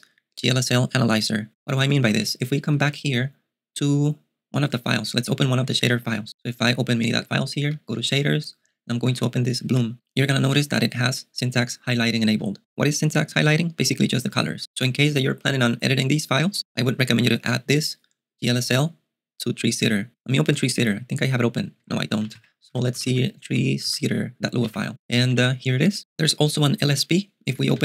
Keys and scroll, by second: 2.3 super+Tab, 2.8 space, 2.8 BackSpace, 5.2-9.7 typing, 9.7 Return, 13.9-14.4 typing, 20.6 shift+h, 21.9 Escape, 22.3-25.9 typing, 24.7 Return, 27.6 :.